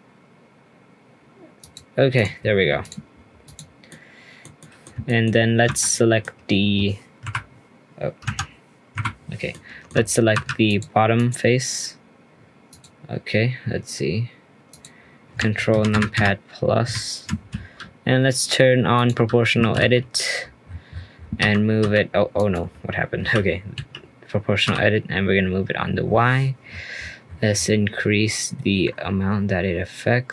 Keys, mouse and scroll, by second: 2.1 click, 2.4-2.8 scroll up 2, 2.8 click, 3.4 click, 3.9-5.4 middle drag, 5.4 scroll up 2, 5.6 Tab, 5.8-7.2 middle drag, 7.2 KP_Decimal, 8.2 Tab, 8.9 KP_Decimal, 9.5-9.9 middle drag, 9.9 Tab, 10.3 3, 10.6 click, 11.1 click, 12.7-14.8 drag, 15.7 ctrl+KP_Add, 15.9 ctrl+KP_Add, 16.1 ctrl+KP_Add, 16.8 ctrl+KP_Add, 18.9 click, 23.2 g.